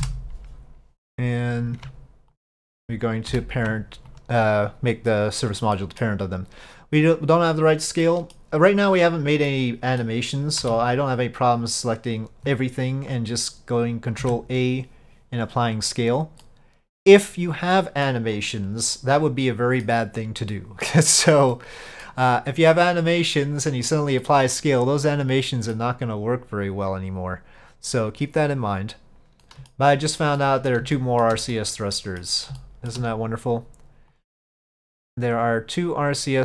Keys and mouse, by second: 2.5 ctrl+click, 3.4 ctrl+p, 5.8 middle drag, 8.1-8.4 middle drag, 9.5-10.1 middle drag, 14.3 ctrl+a, 16.5-17.3 middle drag, 18.5 click, 19.0-19.9 middle drag, 20.6 middle drag, 21.6-22.1 middle drag, 23.0-24.0 middle drag, 24.3-25.8 middle drag, 29.5-29.8 middle drag, 30.5-30.8 middle drag, 31.0-31.3 middle drag, 31.6-32.3 middle drag, 32.7-33.0 shift+middle drag, 34.2 click, 34.7 click, 35.5 click, 36.0 click.